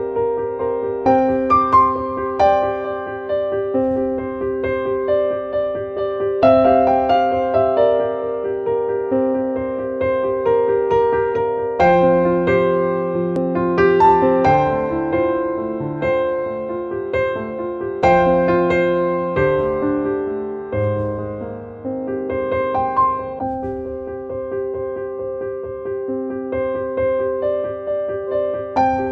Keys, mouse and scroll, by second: 15.5 click, 17.7 click, 18.9 click.